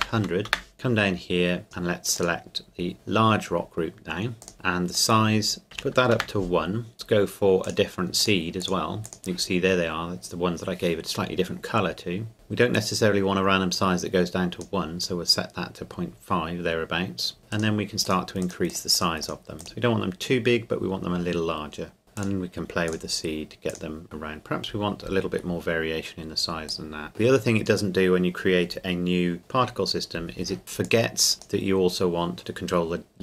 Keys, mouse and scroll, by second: 0.5 KP_Enter, 0.7 click, 4.4 click, 5.0 click, 5.7 KP_1, 6.2 KP_Enter, 7.6 click, 12.0-12.8 scroll down 1, 12.8 click, 17.5 click, 22.2 click, 24.4-26.1 scroll down 1, 26.7 click, 30.8 click.